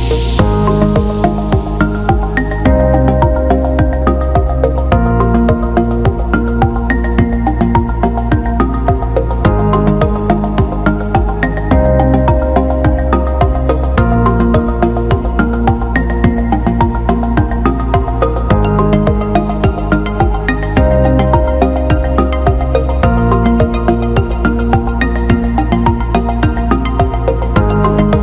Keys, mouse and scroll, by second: 0.3 alt+middle click, 1.4 alt+middle click, 2.4 alt+shift+middle click, 3.1-4.1 alt+middle drag, 4.5 alt+shift+middle click, 8.0 alt+middle click, 9.4 click, 11.5 alt+shift+middle click, 13.7 alt+shift+middle drag, 14.2 alt+shift+middle drag, 14.7 click, 15.2 Tab, 15.8 alt+shift+middle click, 16.3 middle click, 23.6 alt+middle click, 26.5 click, 27.8-28.2 drag.